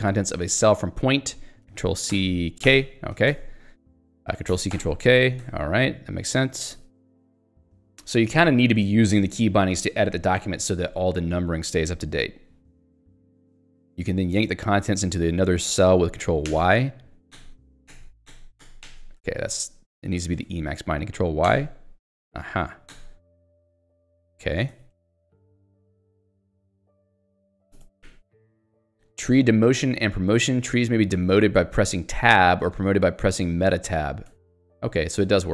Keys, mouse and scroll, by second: 0.4 l, 3.4 ctrl+/, 4.1 k, 4.8 ctrl+k, 5.5 ctrl+/, 6.8 Escape, 7.1 j, 14.6 k, 15.4 j, 16.6 ctrl+y, 19.2 j, 20.0 k, 20.5 ctrl+z, 21.5 ctrl+y, 23.7 ctrl+/, 26.6 ctrl+g, 27.4 ctrl+z, 27.8 Escape, 28.1 j, 30.5 k, 32.2 j, 32.5 k, 34.4 Tab, 35.4 shift+Tab.